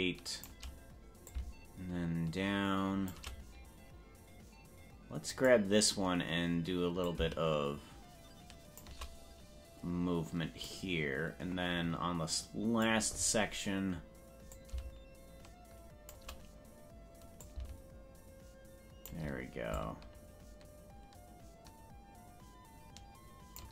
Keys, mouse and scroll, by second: 1.3-3.2 shift+drag, 5.4 click, 7.0-8.9 drag, 10.7-12.9 drag, 14.5-16.2 shift+drag, 17.4-19.1 drag, 19.7-23.6 shift+drag.